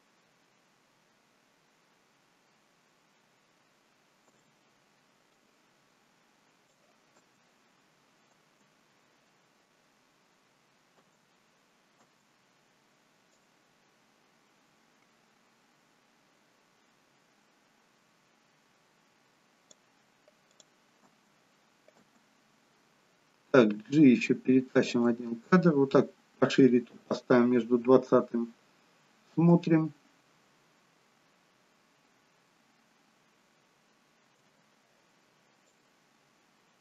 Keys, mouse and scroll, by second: 4.4 space, 5.6 click, 7.3 space, 8.5 space, 12.2 space, 13.6 click, 20.6 click, 21.1 space, 22.2 space, 25.1 g, 29.4 space, 34.7 space, 36.0 click.